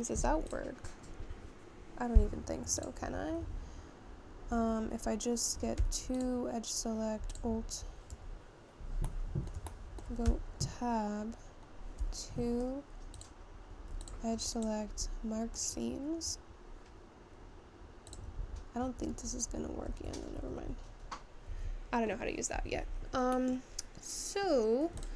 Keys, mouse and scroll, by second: 4.6 Tab, 4.7-5.9 scroll up 1, 5.9-6.4 scroll down 1, 9.2 Tab, 9.3-11.3 middle drag, 11.3 Tab, 15.7-20.2 right drag, 20.2 Tab.